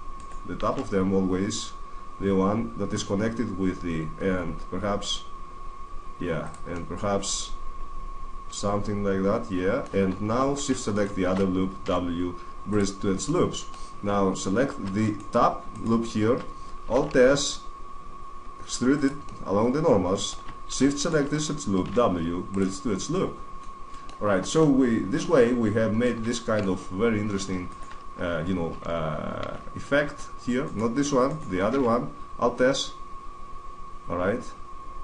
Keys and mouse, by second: 0.3 alt+s, 6.3 click, 6.6 middle click, 7.1 click, 7.3-8.7 middle drag, 9.5-10.5 middle drag, 10.7 click, 10.7-11.8 middle drag, 11.6 w, 13.0 middle click, 14.8 right click, 16.8 alt+s, 19.0 click, 20.7 click, 20.7 middle click, 21.3 right click, 21.6 w, 22.9 middle click, 25.1-29.1 middle drag, 29.3 alt+s, 30.6 right click, 31.7 alt+s, 32.6 click.